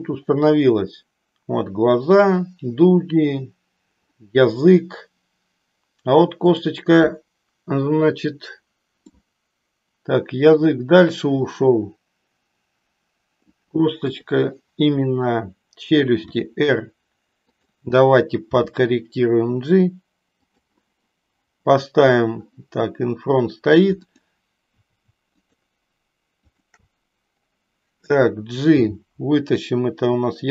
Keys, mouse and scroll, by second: 6.5 click, 9.3-13.7 middle drag, 14.0 KP_3, 16.3 r, 18.5 g, 20.4 click, 24.0 click, 25.4-26.4 shift+drag, 26.5 shift+click, 28.9 g.